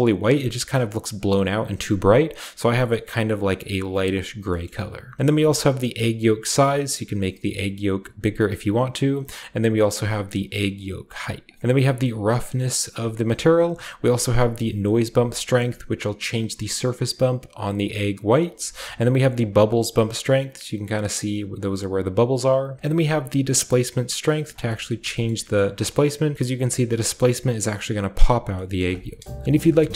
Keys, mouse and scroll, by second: 1.7 middle click, 2.7-3.6 middle drag, 2.9-3.6 scroll up 1, 4.1 scroll down 1, 4.4 shift+middle click, 4.6-8.4 shift+middle drag, 5.5-13.3 shift+drag, 8.5 shift+right click, 13.2 right drag, 13.9-22.3 drag, 18.4 right drag, 22.2 right click, 22.8-24.3 middle drag, 22.8-24.3 scroll up 2, 24.3 shift+click, 24.3 right click, 24.6-26.3 shift+middle drag, 24.9-26.3 shift+scroll up 3, 26.3-28.2 scroll up 1, 26.6-28.2 middle drag, 28.4-29.4 scroll down 1, 28.8 middle click, 29.3 KP_0, 29.4 shift+scroll up 2, 29.4 a, 29.5 a.